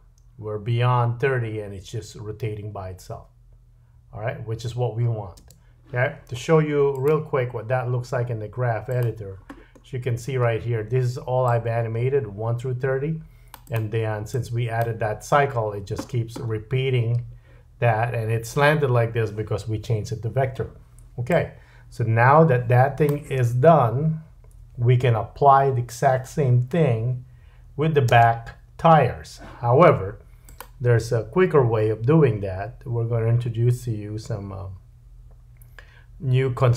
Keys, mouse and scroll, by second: 5.4 space, 6.9 click, 9.7-11.4 scroll down 5, 11.5 click, 13.7-14.3 drag, 15.9-16.8 scroll down 6, 21.3 click, 23.3 space, 28.1-36.7 drag, 28.1-36.7 middle drag, 28.1-36.7 right drag, 28.1 space.